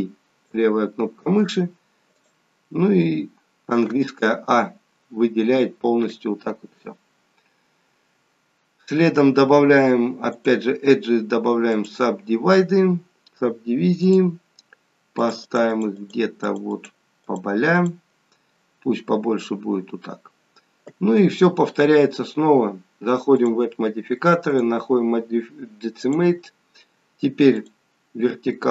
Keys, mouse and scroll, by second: 2.2 click, 3.9 a, 10.3 click, 14.1 click, 15.2 click, 15.4 click, 15.6 click, 16.0 click, 16.7 click, 17.8 click, 19.2 scroll up 3, 20.0-20.8 scroll down 1, 23.5 click, 24.6 click, 27.6 click.